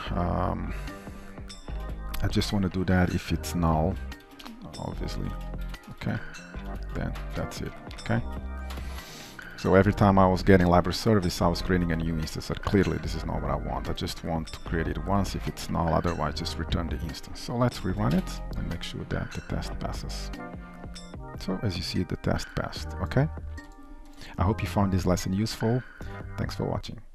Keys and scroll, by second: 4.2 Return, 5.4 ctrl+shift+Up, 6.3 ctrl+y, 6.8 ctrl+s, 8.4 ctrl+alt+o, 8.8 ctrl+s, 17.9 shift+F10.